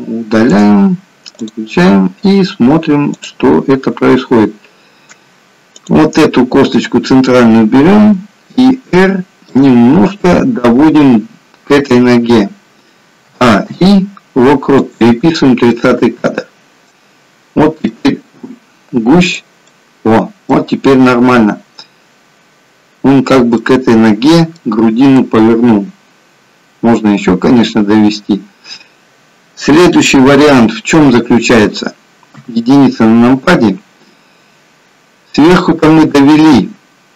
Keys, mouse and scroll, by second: 3.1 click, 5.8 click, 8.1 r, 13.3 a, 13.7 i, 15.7 middle click, 15.7-16.4 scroll down 1, 19.6 click, 21.0-21.4 scroll up 2, 23.5 middle click, 30.7-31.7 scroll down 1, 32.3 KP_1.